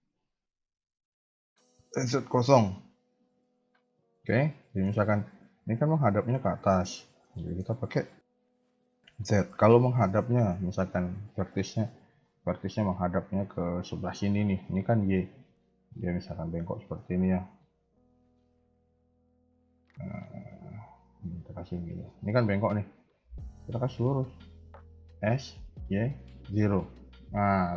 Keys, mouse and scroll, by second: 0.0 KP_1, 0.3 KP_3, 2.0 KP_1, 2.4 KP_3, 3.9 shift+middle click, 4.3 middle click, 4.9 KP_1, 5.0 KP_3, 7.3 shift+middle click, 16.3 a, 16.4 a, 16.8 ctrl+r, 17.7 a, 17.9 a, 19.4 click, 21.0 g, 23.5 alt+click, 25.1 s.